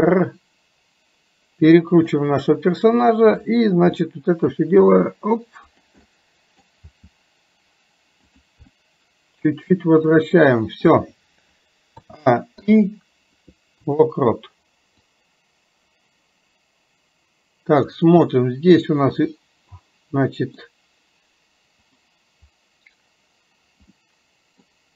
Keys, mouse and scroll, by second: 3.3 click, 4.1 middle click, 6.2 middle click, 8.7-10.9 middle drag, 15.2-18.0 drag, 18.3-20.7 middle drag, 22.0 click, 24.2 middle click.